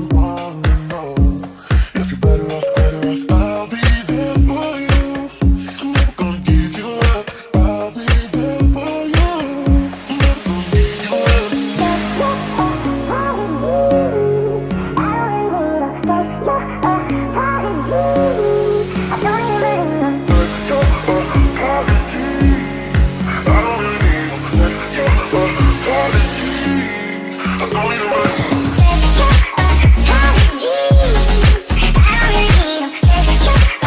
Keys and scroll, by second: 30.5-31.3 typing.